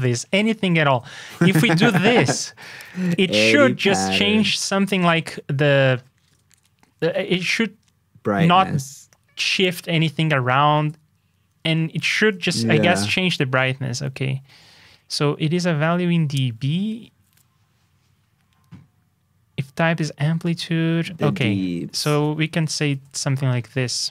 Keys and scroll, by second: 0.6 alt+shift+Down, 2.2 super+Tab, 3.2 super+c, 3.6 super+Tab, 5.2 super+v, 12.5 super+Tab, 21.4 super+Tab.